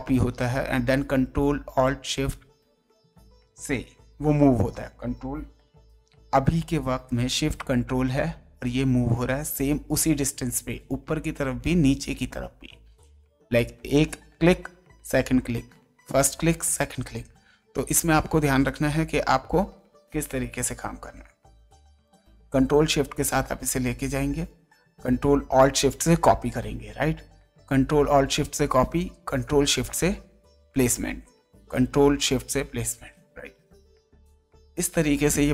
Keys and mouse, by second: 8.1 ctrl+shift+Down, 9.2 ctrl+shift+Up, 10.2 ctrl+shift+Down, 11.0 ctrl+shift+Up, 11.8 ctrl+shift+Down, 12.7 ctrl+shift+Up, 14.6 ctrl+shift+Up, 15.5 ctrl+shift+Down, 17.4 ctrl+shift+Up, 18.8 ctrl+shift+Down, 22.5 ctrl+shift+Down, 28.3 ctrl+shift+Down, 30.7 ctrl+shift+Down.